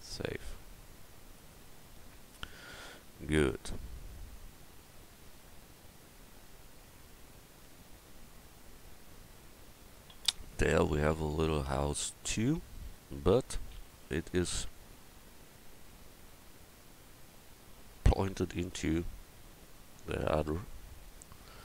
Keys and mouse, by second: 10.8 drag, 13.2 KP_1.